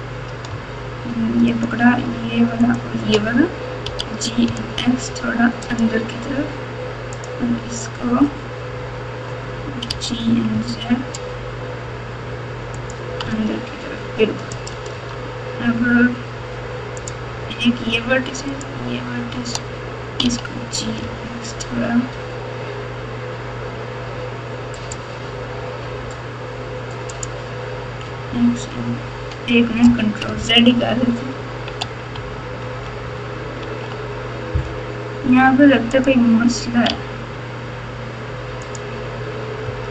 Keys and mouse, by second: 1.5 shift+click, 2.6 shift+click, 3.8 g, 7.1 click, 9.9 g, 13.2 Tab, 14.5 click, 14.9 Tab, 17.0 click, 20.2 g, 24.8-25.6 right drag, 27.1 click, 28.0 x, 30.6 ctrl+z, 31.8 ctrl+z, 32.1 ctrl+z, 33.6 ctrl+z, 35.9 click, 36.8 g, 39.6 x.